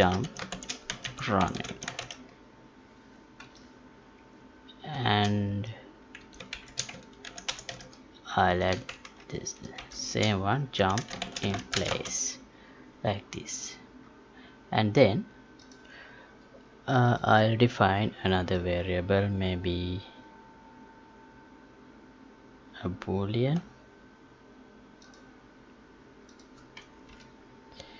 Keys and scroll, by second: 7.2 ctrl+c, 8.4 Left.